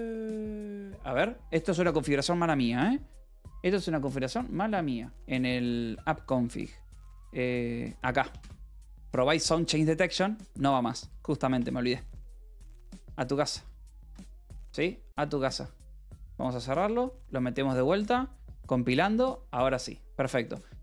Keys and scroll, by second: 5.4 c, 5.7 Return, 6.1 j, 6.5 k, 8.8 shift+v, 10.9 d, 11.2 Escape, 12.0 ctrl+s, 12.3 k, 13.5 d, 15.1 alt+p, 15.2 alt+w, 16.4 Up, 16.7 Return, 19.4 alt+p, 19.5 alt+w, 20.5 space.